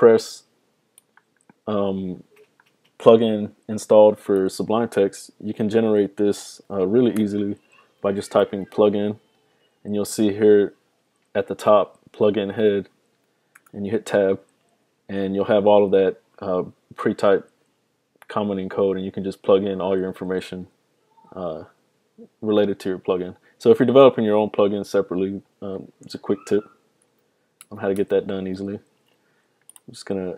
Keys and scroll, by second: 7.9-9.3 typing, 27.1 super+z, 27.7 super+z, 28.1 super+z.